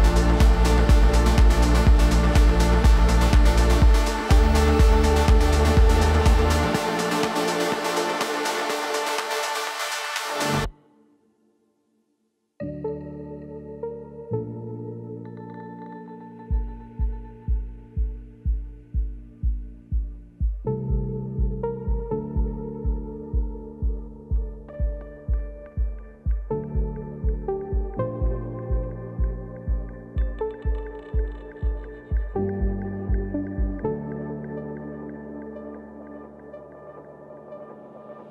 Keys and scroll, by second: 27.9 ctrl+t.